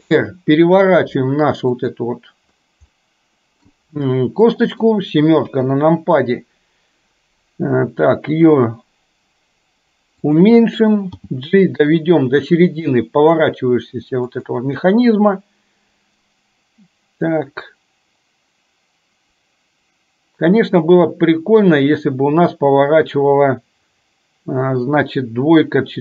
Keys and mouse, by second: 0.0 r, 3.0 middle click, 4.5 middle click, 5.5 KP_7, 11.1 g.